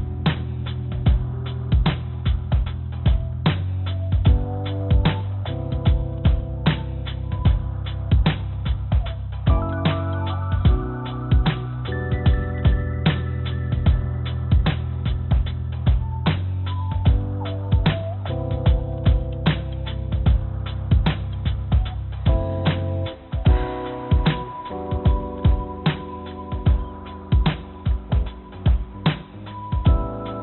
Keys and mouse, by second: 1.8 e, 8.2 s, 13.9 f, 14.4 click, 16.1 click, 18.5 ctrl+z, 18.7 ctrl+z, 18.8 ctrl+z, 19.7 click, 20.5 click, 21.9-22.9 drag, 23.6 click, 25.3 click, 25.5 click, 25.9 click, 28.0 g.